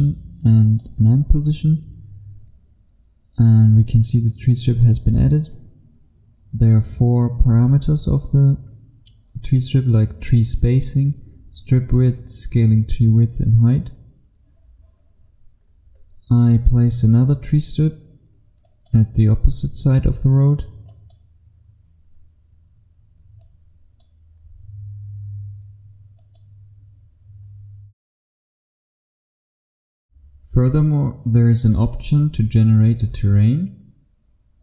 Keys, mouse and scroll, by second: 0.6 click, 15.7-18.7 scroll up 1, 18.7 click, 22.7-23.5 scroll down 1, 23.5 click, 24.5-26.3 scroll up 1, 26.3 click, 27.6-29.5 scroll down 1, 29.5 F1.